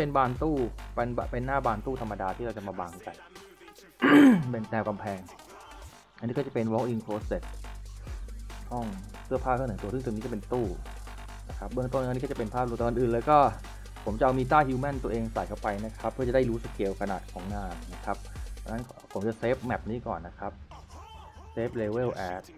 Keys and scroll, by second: 0.0-3.1 typing, 5.1 e, 5.4 w, 7.9 a, 9.1 s, 9.4 e, 11.0 s, 11.6 a, 14.8 w, 15.1 s, 17.5 ctrl+s.